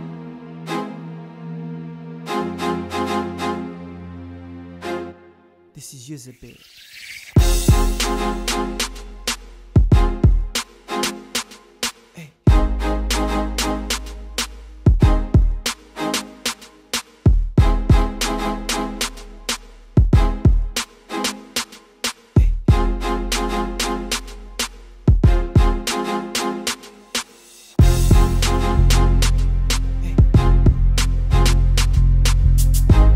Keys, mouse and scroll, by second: 1.2 click, 2.0 shift+click, 2.3 ctrl+p, 3.3 click, 3.6 click, 3.9 click, 4.4 g, 6.4-8.1 drag, 8.1 KP_7, 8.3-8.9 scroll down 1, 8.9 g, 10.8 shift+a, 11.9 s, 15.8 click, 16.3 KP_3, 16.9 r, 18.9 click, 20.1 click, 20.5 g, 21.6 click, 22.4 click, 24.2 click, 25.3 click, 27.1 click, 28.6 click, 29.6 click, 30.0 click, 30.8 e.